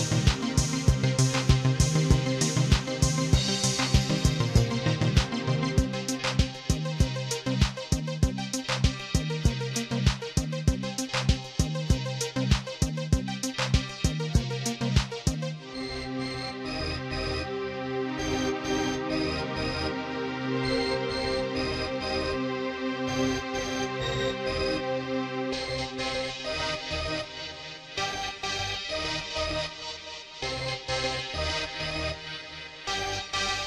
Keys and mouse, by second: 1.0 click, 4.0 click, 5.9 click, 7.2 click, 8.3 click, 9.9 click, 11.3 click, 13.0 click, 14.7 click, 16.2 click, 17.2-19.0 drag, 19.2 click, 21.2 click, 22.7 click, 23.0 click, 23.4 click, 25.1 click, 26.2 click, 27.5 click, 28.5 click, 29.5 click, 30.4 click, 32.5 click, 33.5 click.